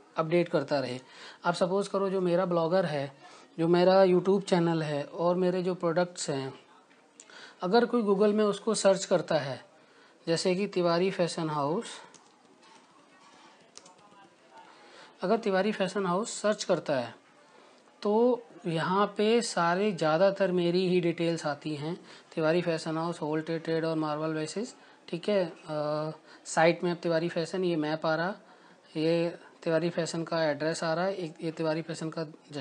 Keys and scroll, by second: 2.2-3.0 typing, 3.4 Return, 12.9-16.9 typing, 19.6 Return.